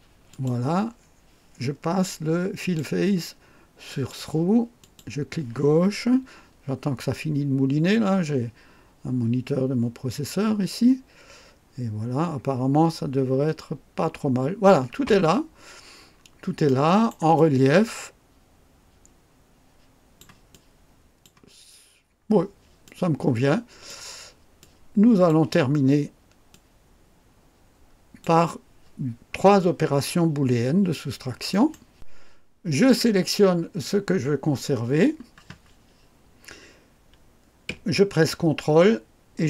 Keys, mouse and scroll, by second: 0.3 click, 2.6 click, 3.8 click, 4.8 click, 15.2-15.5 scroll up 1, 16.1 scroll down 1, 16.6 right click, 17.3-20.4 drag, 20.5 click, 21.7 scroll down 1, 22.8 click, 24.6 click, 26.5-28.4 drag, 31.5 right click, 32.7 click.